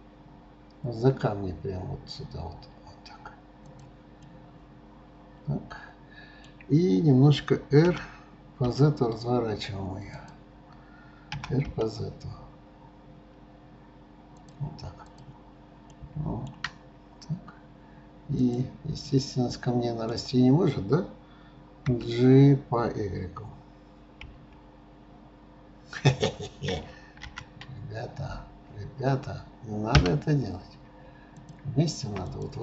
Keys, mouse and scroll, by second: 4.3-7.4 middle drag, 10.5-10.8 drag, 15.3 click, 16.0-16.9 middle drag, 16.9 scroll up 2, 18.8 click, 19.2-21.9 middle drag, 21.9 g, 31.4 shift+click.